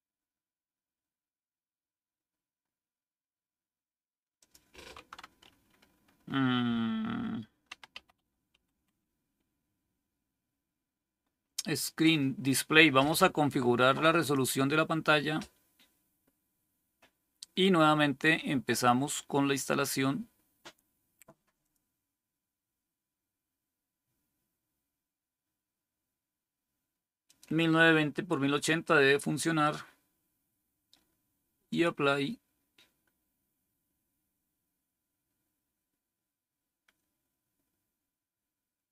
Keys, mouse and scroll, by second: 4.3 click, 7.4-9.1 typing, 14.1 click, 21.5 click, 27.1 click, 31.6 click.